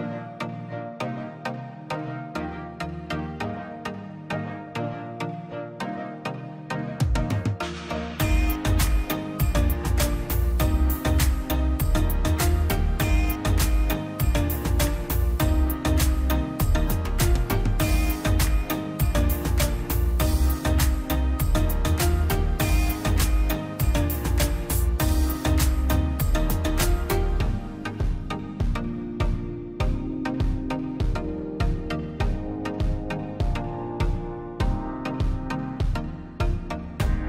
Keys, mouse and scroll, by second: 0.1 click, 0.8-1.3 scroll down 1, 1.3 click, 1.7 scroll up 1, 3.1 Escape, 3.5 l, 3.8-4.4 scroll up 1, 4.4 click, 5.8 space, 5.9 scroll up 1, 6.8 middle click, 7.0 scroll up 1, 7.6 middle click, 7.9-8.4 scroll up 1, 8.4 l, 8.9 click, 10.9 space, 11.2-12.2 scroll up 1, 12.5 scroll down 1, 12.5 middle click, 13.4-13.8 scroll up 1, 14.3 click, 14.6-15.5 scroll down 2, 14.7 middle click, 15.9 middle click, 16.2 scroll down 1, 17.7 middle click, 18.1-18.8 scroll up 1, 19.5 middle click, 19.5-20.2 scroll down 2, 19.8 click, 20.3 middle click, 21.1-21.7 scroll down 1, 21.7 Delete, 22.1 scroll up 1, 22.6 scroll down 1, 23.0 middle click, 23.6 scroll up 1, 24.6 p, 24.8-26.2 drag, 26.2-26.6 scroll down 1, 26.6 middle click, 27.1 click, 27.3 scroll down 1, 27.6 middle click, 28.0 scroll up 1, 28.3 middle click, 28.8 scroll up 1, 29.1 scroll down 1, 29.4 middle click, 30.7 scroll up 1, 31.3 l, 31.9 scroll up 1, 32.1 click, 34.0 space, 34.2 middle click, 34.5-34.8 scroll up 1, 34.8 click, 35.3 right click, 36.1 click, 37.0 scroll up 1, 37.1 click.